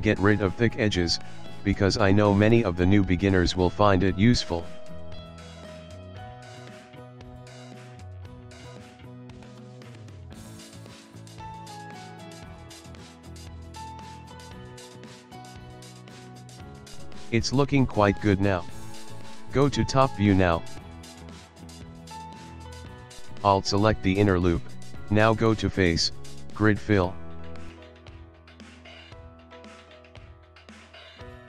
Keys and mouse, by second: 0.3 middle click, 0.6 ctrl+middle click, 1.0 shift+middle click, 1.3 shift+middle click, 1.4 ctrl+middle click, 1.7 shift+middle click, 1.8 shift+middle click, 2.4 alt+click, 2.9 alt+click, 3.7 g, 4.6 alt+click, 5.0 s, 6.8 ctrl+middle click, 7.1 ctrl+middle click, 7.4 Tab, 7.7 middle click, 8.3 Tab, 9.0 KP_1, 9.7 shift+middle click, 10.9 shift+middle click, 11.0 shift+middle click, 11.2 ctrl+middle click, 11.5 shift+middle click, 11.7 shift+middle click, 12.4 ctrl+middle click, 12.8 shift+middle click, 13.0 shift+middle click, 13.4 click, 13.9 middle click, 14.5 Tab, 14.7 middle click, 15.4 click, 16.1 shift+middle click, 16.3 shift+middle click, 16.5 shift+middle click, 17.1 middle click, 17.7 middle click, 18.0 ctrl+middle click, 18.5 middle click, 19.0 middle click, 19.5 KP_7, 20.1 ctrl+middle click, 20.4 ctrl+middle click, 21.3 click, 21.9 shift+middle click, 22.3 click, 22.7 Tab, 23.5 alt+click, 26.3 click, 28.2 ctrl+middle click, 29.3 middle click, 30.4 shift+middle click, 30.6 shift+middle click.